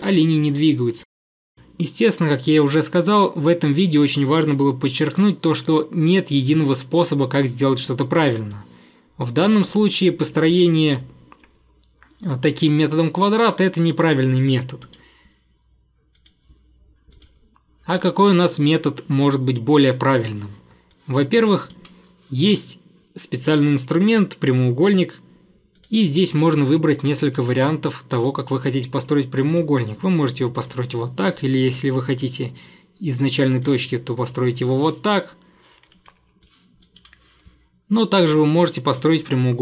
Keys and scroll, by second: 14.9 Delete, 21.7 Delete, 35.9 Escape, 37.0 Delete, 38.9 Delete.